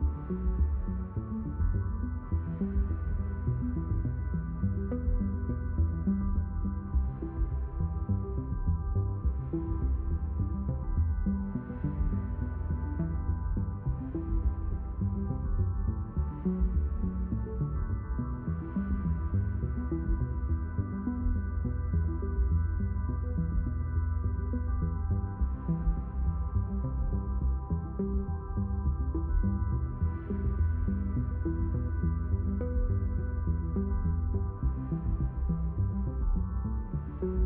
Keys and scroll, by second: 4.4 space, 9.5 space, 21.1 space, 27.4 space, 36.2 space.